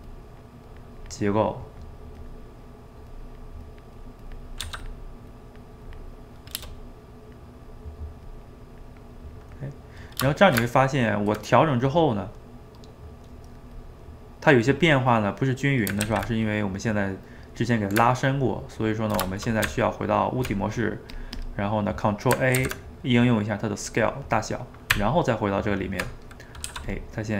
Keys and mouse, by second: 0.1-1.4 drag, 1.4 middle click, 2.2 click, 2.5 middle click, 3.1-4.6 drag, 4.6 f, 5.3 click, 6.1 middle click, 6.8 click, 7.2 middle click, 7.7 click, 8.6 middle click, 9.2 click, 9.5-10.5 middle drag, 10.5 shift+right click, 10.6-13.8 ctrl+middle drag, 13.8 click, 14.1 middle click, 14.9 click, 15.4 middle click, 16.1 ctrl+z, 18.1-19.7 ctrl+middle drag, 19.7 Tab, 21.2 click, 21.5 click, 22.6 ctrl+a, 24.7 middle click, 24.9 Tab, 26.4 middle click, 26.7 f, 27.2-27.3 drag.